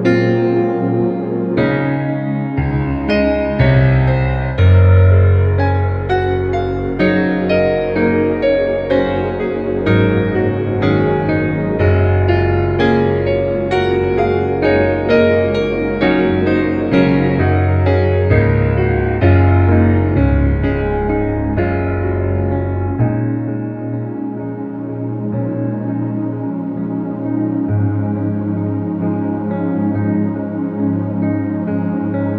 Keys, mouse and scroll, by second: 3.1 ctrl+=, 4.3-5.3 space, 6.6 ctrl+-, 7.3 ctrl+t, 7.8-8.4 click, 8.7 ctrl+-, 9.4-10.0 alt+drag, 12.3-12.7 alt+shift+click, 14.2 ctrl+=, 15.4 ctrl+=, 16.3 space, 16.6 click, 16.8 space, 17.3-18.1 space, 18.2 b, 18.8 alt+click, 19.6 click, 22.5 space, 23.4 ctrl+alt+g, 24.0 right click, 24.8 click, 26.5-27.4 click, 27.5-28.8 ctrl+alt+drag.